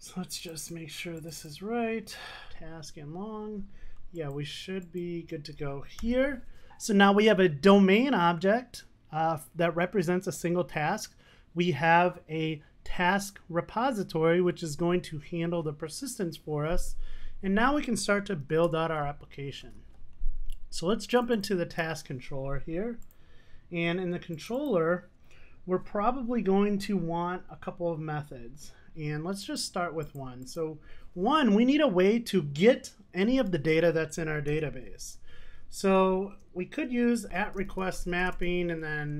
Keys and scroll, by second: 6.1 super+s, 34.5 Tab.